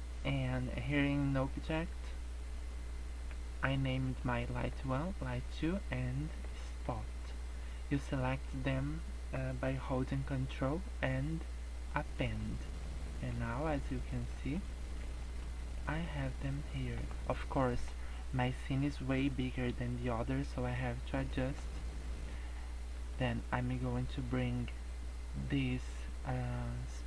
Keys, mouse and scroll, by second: 12.5 scroll down 5, 12.7 middle click, 13.2 scroll up 4, 13.5 middle click, 13.9-14.3 scroll up 2, 14.3 middle click, 14.5 scroll up 1, 15.3 middle click, 15.7 middle click, 15.7 scroll down 1, 16.2 middle click, 16.7 middle click, 21.0 scroll down 3, 21.3 middle click, 22.9 click.